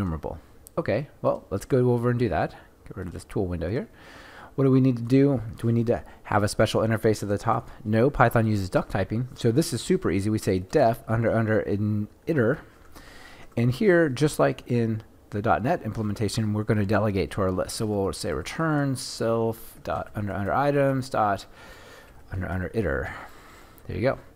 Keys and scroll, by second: 12.7 Return, 20.6 Return.